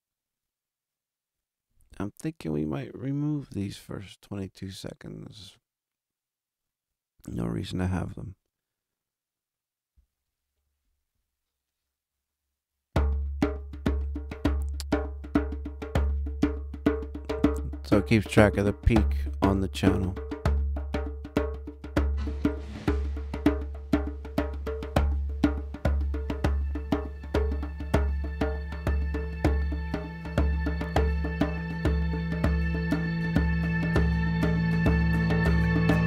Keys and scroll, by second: 13.3 super+=.